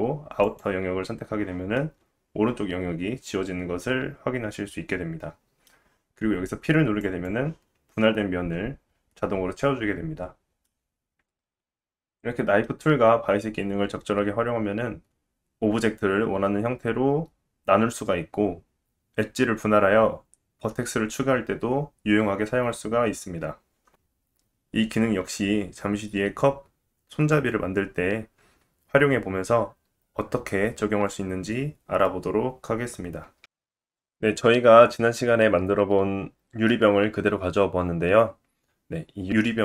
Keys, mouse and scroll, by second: 0.5 click, 1.8-3.5 middle drag, 7.0 click, 8.1-10.1 scroll up 2, 10.7-11.2 middle drag, 33.5 click.